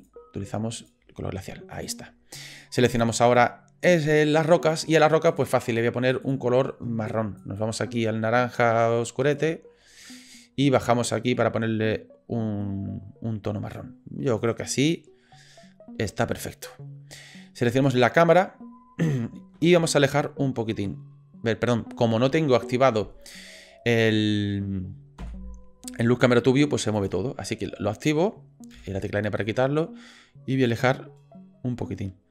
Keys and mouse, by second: 2.9 click, 5.4 click, 14.5-18.0 drag, 20.0 ctrl+click, 20.1-22.0 ctrl+middle drag, 25.3 n, 27.0 click, 28.7 n, 29.6-30.8 ctrl+drag, 30.8 ctrl+middle click, 31.7-32.3 ctrl+drag.